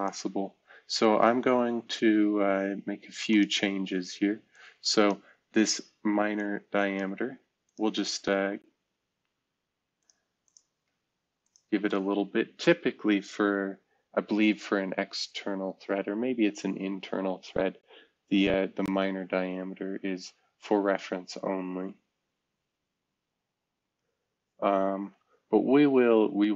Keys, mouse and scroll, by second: 9.9 click.